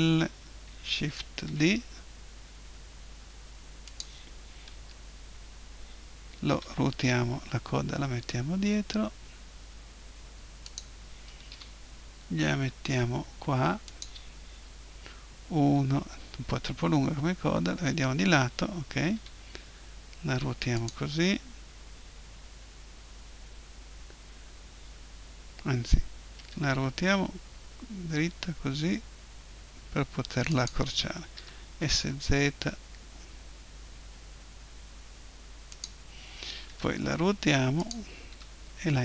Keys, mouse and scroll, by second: 1.1 shift+d, 4.0 click, 4.7 KP_7, 6.5 r, 10.7-12.7 drag, 11.5 g, 14.0 click, 14.7 KP_1, 17.1 KP_3, 19.1 r, 20.9-22.8 drag, 26.3 r, 30.7-32.6 drag, 31.3 s, 35.8 click, 36.7 r, 37.5 click, 37.9-39.0 drag, 38.3 g.